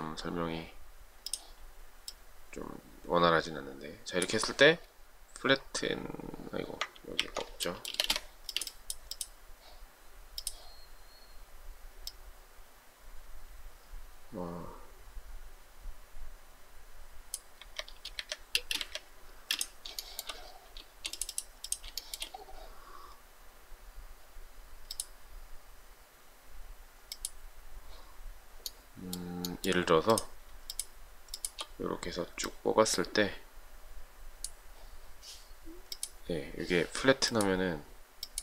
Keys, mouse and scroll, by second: 7.3 ctrl+z, 8.0 space, 8.1 Escape, 17.6 Escape, 18.3 Escape, 18.6 space, 18.8 Escape, 20.1 shift+middle click, 22.0 shift+middle click, 22.2 shift+double middle click, 30.7 shift+click, 31.4 shift+click.